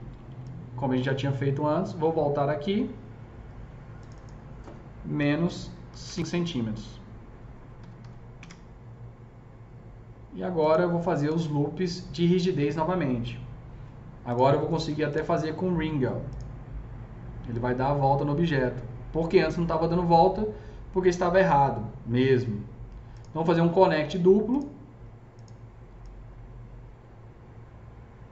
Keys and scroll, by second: 5.0 KP_Subtract, 5.7 KP_5, 5.9 Return, 7.8 KP_Subtract, 7.9 KP_5, 8.2 Return.